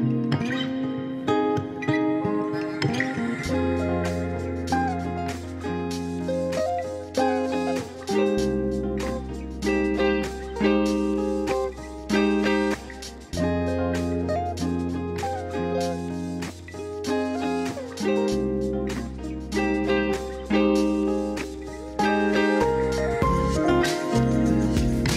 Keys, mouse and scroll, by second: 0.2 alt+shift+click, 2.2 g, 6.0 middle click, 6.6 alt+z, 7.6 click, 8.2 ctrl+s, 9.4 KP_1, 10.0 alt+z, 11.5 ctrl+r, 12.2 alt+z, 15.0 click, 15.3 shift+click, 15.5 shift+click, 15.7 shift+click, 17.2 i, 17.8 click, 17.9-19.3 right drag, 20.3 KP_1, 21.4 r, 21.9 ctrl+z, 23.1 r, 24.0 click, 24.6 s, 24.9 z.